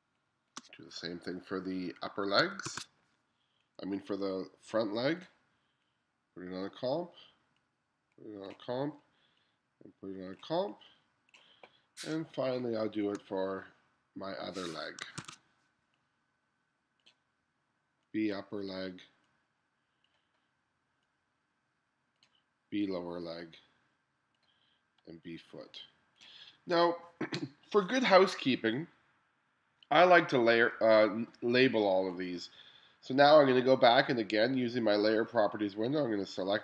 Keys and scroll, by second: 2.7 super+v, 12.4 space, 15.2 super+v.